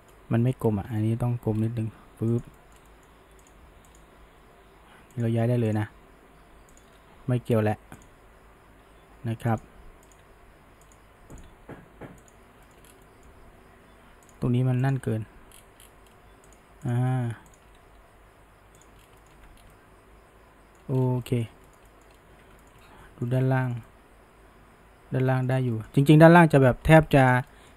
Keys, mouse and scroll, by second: 0.0-0.6 shift+middle drag, 0.6 scroll down 1, 0.9 middle drag, 1.2 g, 2.6-3.5 shift+middle drag, 3.5 click, 3.9 click, 4.2 g, 5.7 click, 5.9 g, 7.4 r, 8.3 g, 10.1 click, 10.3 g, 11.4 click, 11.6 g, 12.7 shift+middle drag, 12.9 scroll, 13.1-14.3 middle drag, 14.3 click, 14.9 shift+drag, 15.2 g, 16.9 click, 17.5 shift+drag, 17.9 g, 19.0 scroll down 1, 19.2 middle click, 19.3 Tab, 19.6 scroll down 1, 19.7-20.9 middle drag, 20.9-21.3 scroll up 1, 21.3 middle click, 21.5 scroll down 1, 21.7-22.2 middle drag, 22.2 scroll up 1, 22.3 Tab, 22.6 shift+middle click, 23.4 scroll up 1, 23.7-25.5 shift+middle drag, 25.5 scroll up 1, 25.8-26.4 shift+middle drag, 26.4-27.3 scroll up 1, 27.3 click, 27.5-27.7 middle drag.